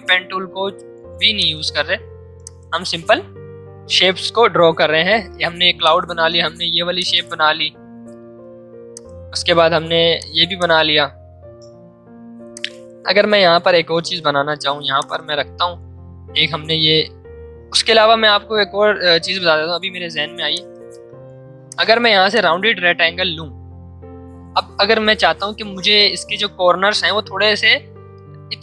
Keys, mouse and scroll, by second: 5.7 space, 5.8-8.9 drag, 10.0 space, 10.1 click, 11.5 m, 12.5-14.2 shift+drag, 14.2 v, 14.8 space, 15.0 click, 15.3 space, 16.6 ctrl+z, 18.1-18.8 typing, 20.5-28.6 drag.